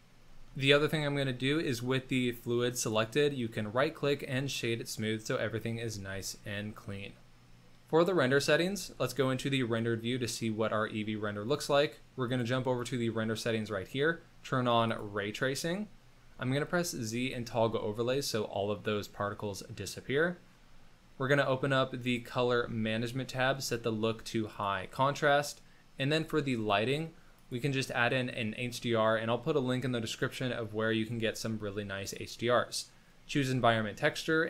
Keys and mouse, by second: 0.5-1.4 shift+drag, 2.7-5.6 drag, 5.9 shift+middle drag, 6.2-7.3 middle drag, 8.6 z, 10.2 click, 12.3 click, 16.2 z, 18.3-19.8 drag, 23.6-24.7 drag, 30.3-32.3 drag, 34.4 click.